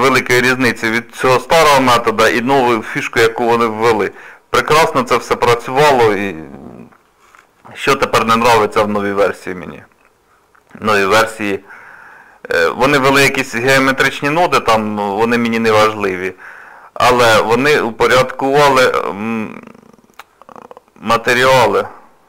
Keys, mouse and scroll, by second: 4.7 middle click.